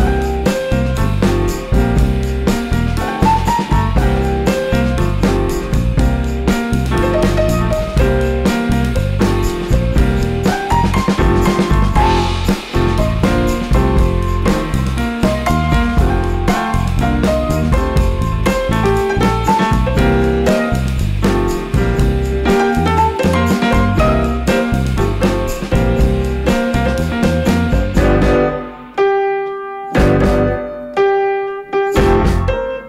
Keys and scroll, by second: 3.7 super+x, 5.4 super+z, 11.8 super+x, 19.9 super+z, 20.8 super+x, 26.0 super+x, 26.5 super+x, 28.1 super+x, 28.3 super+z, 28.5 super+d, 28.7 super+x, 29.3 super+x, 29.7 super+x, 31.2 super+x, 31.5 super+x.